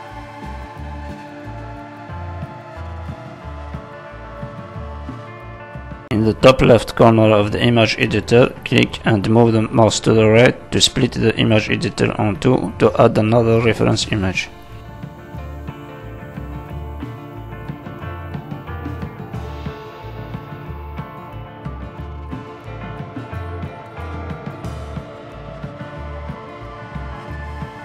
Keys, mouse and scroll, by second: 0.4 shift+click, 1.0 shift+click, 1.5 shift+click, 2.0 f, 2.2 middle click, 3.2 scroll down 2, 3.4 shift+middle click, 3.6 middle click, 4.6 middle click, 5.2 middle click, 5.6 scroll up 1, 5.8 middle click, 6.5 shift+middle click, 6.9 middle click, 7.6-8.6 scroll down 3, 9.4 click, 11.0 middle click, 12.0 click, 16.0-17.1 scroll down 11, 16.9 middle click, 17.2-21.1 scroll up 7, 17.5 middle click, 18.2 middle click, 18.7 middle click, 21.1 click, 21.7-22.0 scroll down 3, 22.0 middle click, 22.7 middle click, 24.1 middle click, 25.3 middle click, 26.9 middle click, 27.6 middle click.